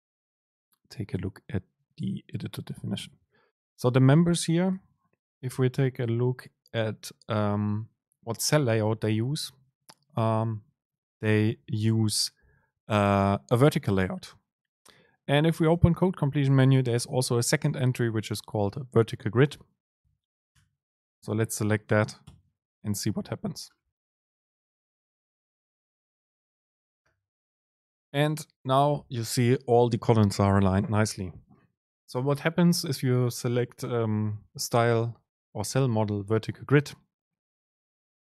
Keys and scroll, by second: 4.9 super+2, 15.9 super+space, 22.4 ctrl+shift+super+F9.